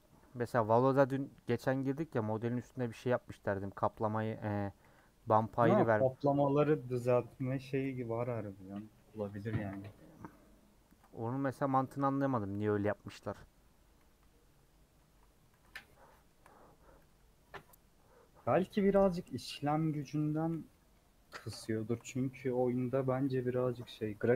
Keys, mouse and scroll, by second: 0.0 u, 0.7 scroll down 3, 1.0 middle click, 1.5 scroll down 1, 1.7 middle click, 2.6 /, 3.0 Tab, 3.9 click, 4.8 h, 5.3 click, 5.3 h, 5.9 click, 6.2 scroll down 4, 6.5 middle click, 7.1 click, 7.8 /, 8.1 middle click, 8.8 Tab, 9.1 scroll up 2, 9.4-13.1 middle drag, 13.1 scroll down 2, 14.0 KP_1, 14.4 KP_3, 14.6 scroll up 2, 15.1 3, 15.5 alt+z, 16.1 middle click, 17.0 KP_3, 20.0 Left, 20.9 ;, 21.7 shift+middle click, 22.4 3, 22.9 click, 23.6 ;, 24.0 scroll down 2, 24.2-24.3 middle drag.